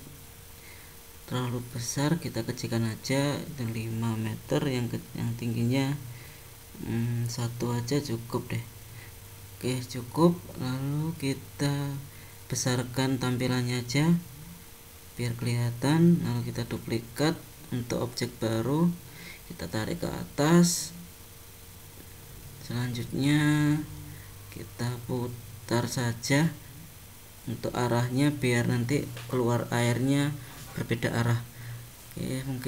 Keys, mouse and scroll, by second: 0.2 Tab, 1.5 click, 5.6 click, 10.2 click, 10.7 scroll up 1, 11.2-11.9 scroll up 2, 12.7 click, 15.8 shift+d, 22.3 scroll down 2, 22.8 middle click, 23.9 r, 29.4 r.